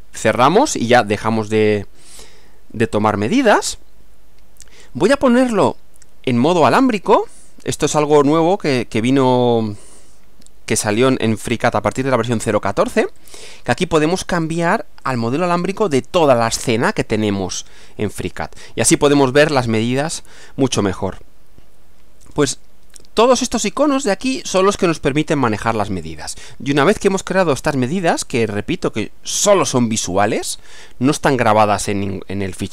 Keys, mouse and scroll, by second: 0.9-3.9 middle drag, 13.2 click, 15.1 click, 18.7-22.5 middle drag, 26.2-27.0 middle drag, 31.8-32.7 middle drag.